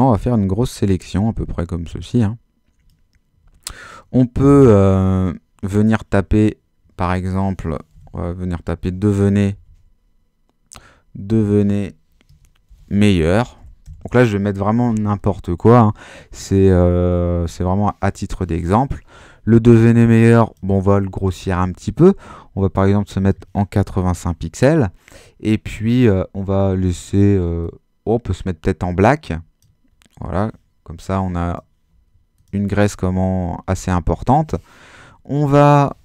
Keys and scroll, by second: 4.4 super+h, 7.7-10.0 typing, 11.4-14.3 typing, 23.6-24.5 typing.